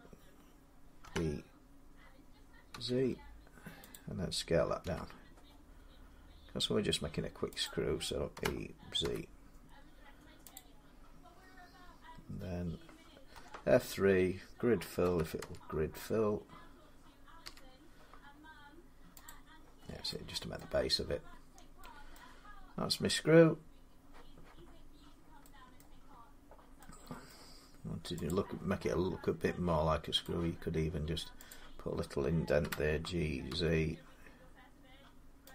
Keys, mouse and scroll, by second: 0.8 typing, 2.5 z, 3.6 typing, 3.7 click, 4.6 s, 7.4 click, 8.2-8.8 typing, 10.3 click, 13.1 F3, 14.8-15.2 typing, 17.2 i, 19.6 click, 19.6 scroll down 2, 20.3 middle click, 20.7-21.6 scroll down 1, 21.9 middle click, 25.6 middle click, 25.9-26.6 scroll down 3, 27.1 middle click, 28.1 click, 28.9 scroll up 3, 30.0 click, 31.3 click, 32.4-33.3 typing, 35.1 z, 35.3 click.